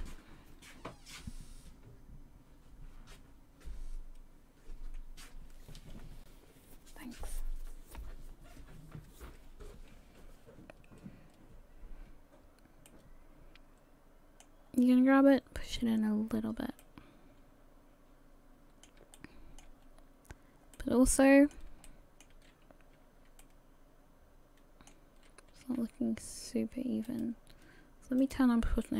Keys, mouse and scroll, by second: 12.9 middle click, 14.7-15.9 scroll up 1, 16.2-16.8 scroll up 1, 16.8 middle click, 19.1 shift+middle click, 19.8-20.7 scroll up 4, 20.7 middle click, 21.8 shift+middle click, 23.4 middle click, 25.8 r, 28.2 click.